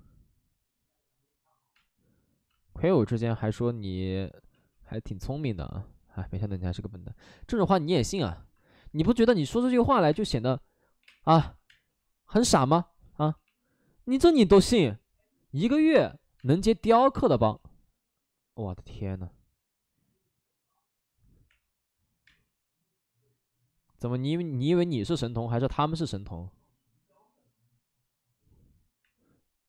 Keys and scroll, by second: 1.7 space, 3.8 space, 4.5 ctrl+z, 8.3 ctrl+z, 10.1-11.6 typing, 13.3 b, 14.7 space, 15.7 ctrl+z, 15.8 space, 16.3 space, 17.5 ctrl+z, 21.5 3, 22.2 space, 28.9 6.